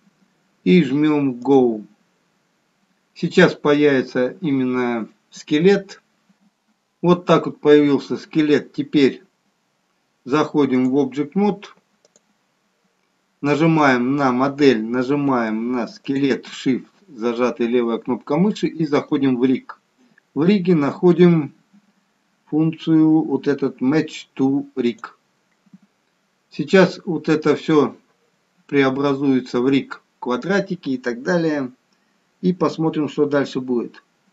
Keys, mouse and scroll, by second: 1.7 click, 10.8 click, 16.1 shift+click, 19.1 click, 24.9 click.